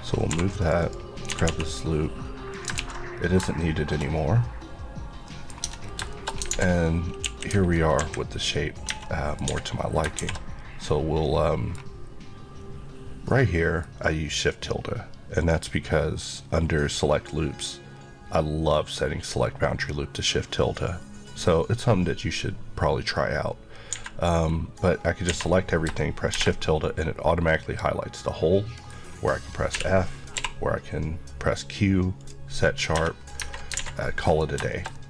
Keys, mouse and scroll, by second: 0.3-1.5 typing, 0.6 click, 2.5 click, 2.8 ctrl+x, 3.1-3.6 scroll down 2, 3.6 shift+middle click, 4.1 scroll down 1, 5.3 middle click, 5.6 Tab, 5.8 scroll down 1, 6.1 shift+middle click, 6.5 alt+z, 7.3-10.2 typing, 8.9 Tab, 9.0 middle click, 11.2 middle click, 15.4 click, 23.9 a, 24.9 scroll up 1, 25.3 a, 26.3 shift+~, 26.8 middle click, 29.0 scroll up 1, 29.7-30.4 typing, 32.2 click, 32.9 click, 33.4-33.8 alt+scroll down 3, 33.8 alt+a, 34.0 middle click, 34.5 scroll down 2, 34.7 shift+middle click.